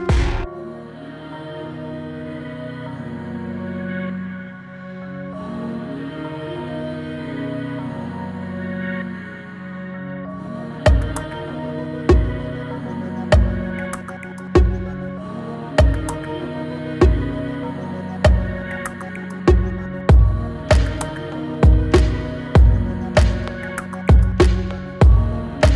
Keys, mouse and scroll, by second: 1.2 Return, 2.2 click, 2.9-4.7 typing, 6.5-10.8 drag, 11.7-13.7 scroll down 1, 15.8 click, 17.9-25.7 drag.